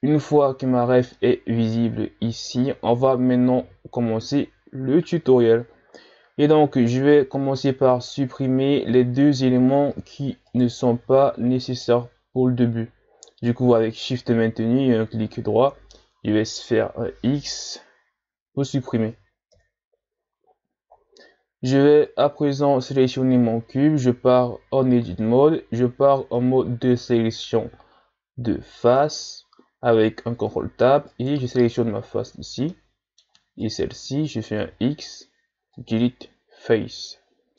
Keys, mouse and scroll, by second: 0.0-0.5 scroll down 1, 0.5-1.1 scroll down 1, 1.1-4.2 middle drag, 4.2-4.6 ctrl+scroll down 3, 7.0 shift+right click, 7.9 shift+right click, 10.5 right click, 11.7 shift+right click, 16.7 Delete, 19.5 KP_1, 20.5-21.4 ctrl+scroll down 3, 21.4-21.9 scroll up 3, 22.1 right click, 23.7 Tab, 26.2 ctrl+Tab, 29.0 ctrl+Tab, 31.1 right click, 32.7 middle click, 33.6 shift+right click, 34.7 x.